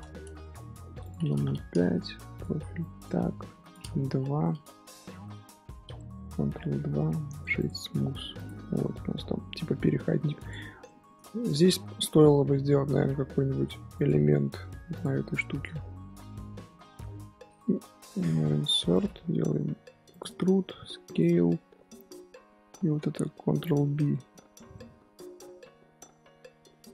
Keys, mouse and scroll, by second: 6.5 ctrl+2, 8.3 click, 8.8 scroll down 2, 8.9-10.1 middle drag, 10.1 scroll up 2, 10.4 click, 10.8-12.6 shift+middle drag, 12.6 Tab, 13.1 Tab, 13.9 click, 14.3-14.6 middle drag, 14.6 3, 14.9 click, 15.1-16.7 middle drag, 16.7 i, 23.6 alt+shift+click, 24.1 shift+middle drag, 24.3-24.7 scroll up 2, 24.7-25.6 middle drag, 25.6 ctrl+b.